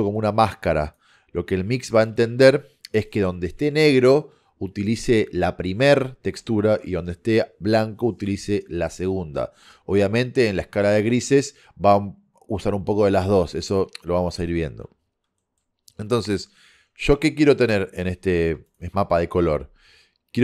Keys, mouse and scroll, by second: 2.2-3.8 middle drag, 15.3 middle click, 18.7-20.4 drag.